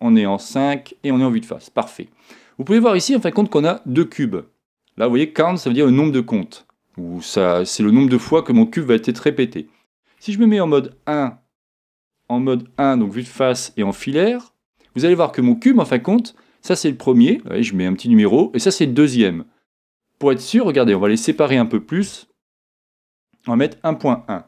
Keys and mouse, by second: 3.6-10.9 middle drag, 10.9 KP_1, 12.7 KP_1, 13.9 z, 20.4 click.